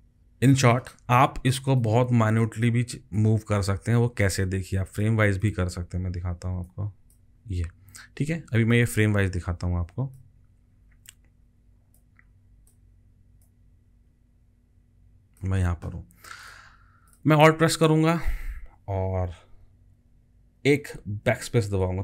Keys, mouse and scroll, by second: 21.3 alt+click.